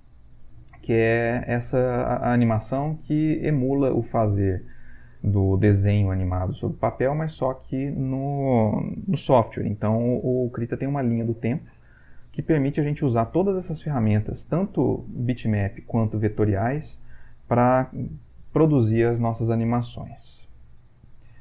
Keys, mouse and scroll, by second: 20.8 click.